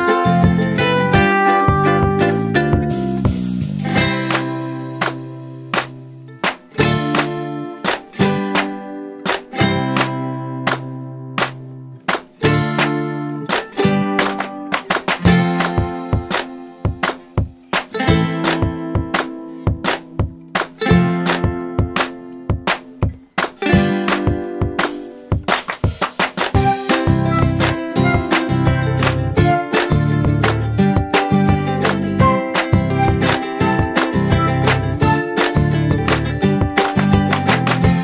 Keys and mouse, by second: 0.2 click, 2.7 click, 4.8 click, 6.7-7.9 drag, 8.4 m, 9.2 click, 9.8 ctrl+d, 11.8-12.7 drag, 16.6 click, 17.7 space, 20.7-21.7 typing, 22.7 Right, 25.1 space, 25.4 d, 27.0-29.5 typing, 29.8 ctrl+a, 31.1 click, 37.1-38.0 drag.